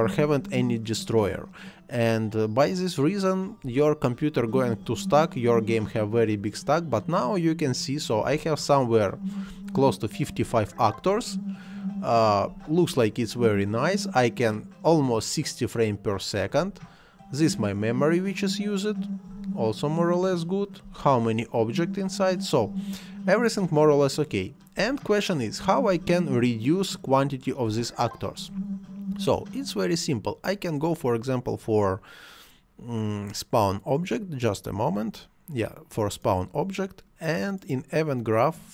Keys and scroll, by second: 3.6 space, 8.2 space, 12.4 space, 16.5 space, 20.8 space, 24.7 space, 27.6 space.